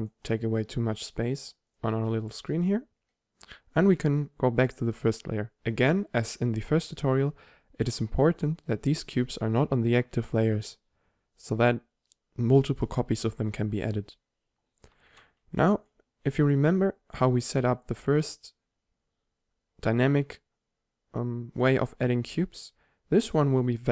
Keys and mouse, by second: 0.7 s, 1.9-2.3 drag, 2.3 middle click, 3.6 1, 5.5-6.8 middle drag, 7.1 middle click, 8.3 2, 11.8 middle click, 13.5-15.2 middle drag, 13.5 1, 16.8 drag, 17.1 click.